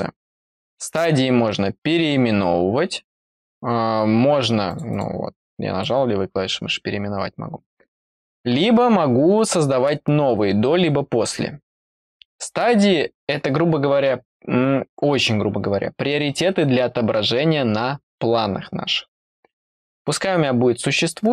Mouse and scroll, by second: 4.7 click, 4.9 click, 5.4 click.